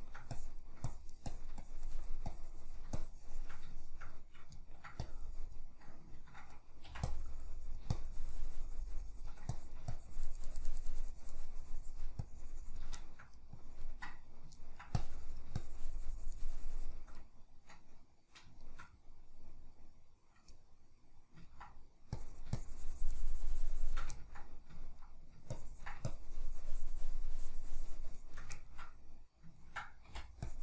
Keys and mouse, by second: 0.0 shift+middle click, 0.4-3.7 drag, 3.7-5.0 shift+middle drag, 5.0-6.1 drag, 6.1 ctrl+middle click, 6.9 c, 7.1-13.0 drag, 13.0 shift+middle click, 13.6-14.6 drag, 14.6 ctrl+middle click, 15.0-18.6 drag, 18.6-22.2 shift+middle drag, 22.2-24.2 drag, 24.2-25.6 ctrl+middle drag, 25.6-28.6 ctrl+drag, 28.6-30.5 ctrl+middle drag, 30.1 typing, 30.5-30.6 drag.